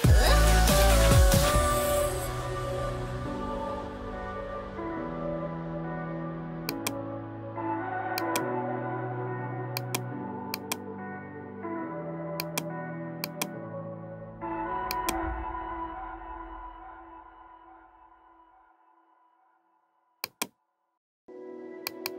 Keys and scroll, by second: 16.2-18.5 typing, 21.1 ctrl+j.